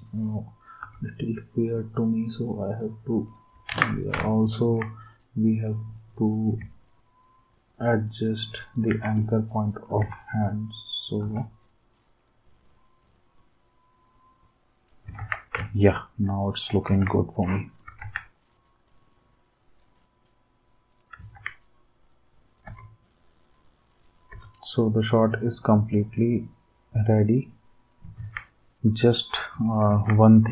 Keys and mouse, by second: 0.8 r, 3.7 ctrl+z, 5.5 d, 8.9 ctrl+s, 10.0 r, 11.2 r, 15.2 ctrl+s, 16.9 ctrl+s, 18.0 ctrl+s, 21.3 ctrl+s, 22.6 space, 24.2 space, 28.2 ctrl+s, 29.8 ctrl+s.